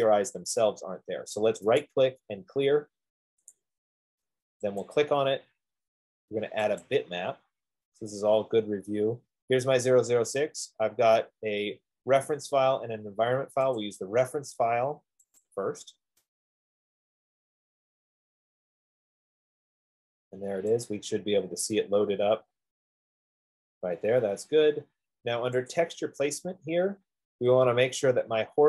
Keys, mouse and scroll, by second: 2.5 right click, 3.8 click, 5.2 click, 7.3 click, 10.4-12.2 drag, 14.4 click, 15.8 click, 19.7-20.7 drag, 21.3-24.5 drag, 26.1 click, 26.4 F15, 27.4-28.6 drag.